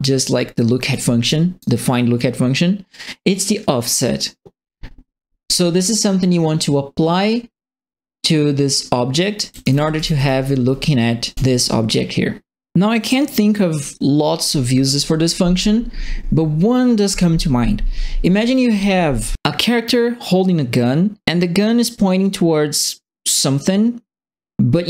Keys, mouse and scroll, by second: 0.9 right click, 0.9 d, 9.3-10.4 right drag, 9.3-10.6 typing.